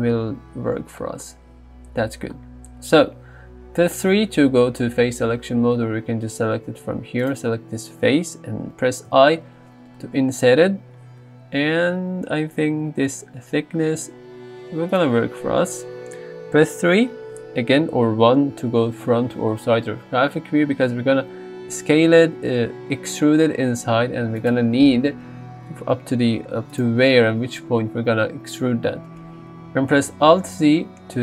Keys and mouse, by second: 2.4 middle click, 3.5 3, 7.3 click, 9.3 i, 14.9 shift+click, 16.8 KP_3, 21.7 e, 24.4 right click, 25.0 ctrl+z, 26.3 g, 26.7-28.1 right drag, 30.5 alt+z.